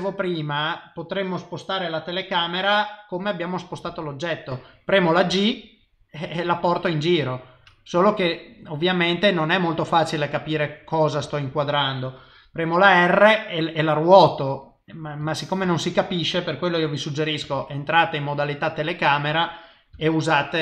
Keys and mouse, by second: 5.3 g, 11.2 ctrl+z, 12.8 r, 15.7 ctrl+z, 17.4 KP_0, 19.9 n.